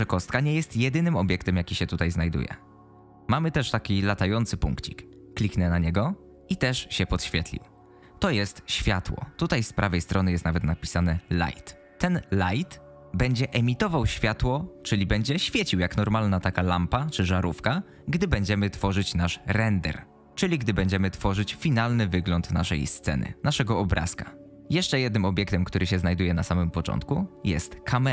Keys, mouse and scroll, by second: 27.6 click.